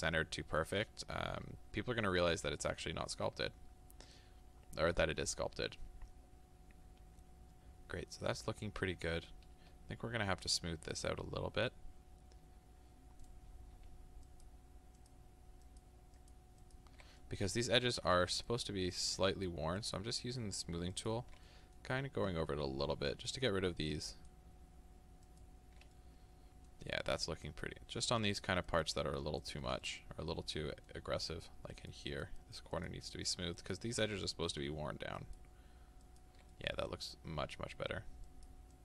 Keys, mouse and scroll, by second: 3.0-3.4 scroll up 2, 3.4-5.0 scroll down 2, 14.3 ctrl+click, 15.7-17.2 ctrl+drag, 17.2-18.5 middle drag, 18.5-21.5 ctrl+drag, 21.5-23.1 middle drag, 23.1-26.0 ctrl+drag, 26.0-27.5 middle drag, 27.5-29.9 ctrl+drag, 29.9-31.8 middle drag, 31.8-34.3 ctrl+drag, 34.3 middle click, 35.2-36.5 ctrl+drag, 36.5-38.3 middle drag, 38.3-38.8 ctrl+drag.